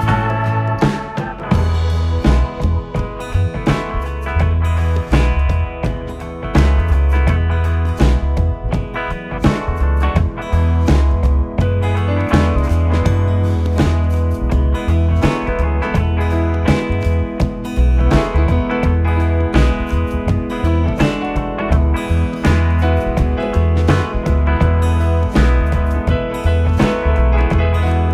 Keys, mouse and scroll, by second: 0.7 g, 4.8 s, 9.0 r, 11.0 g, 14.0 r, 15.8 s, 20.7 Tab, 22.6 e.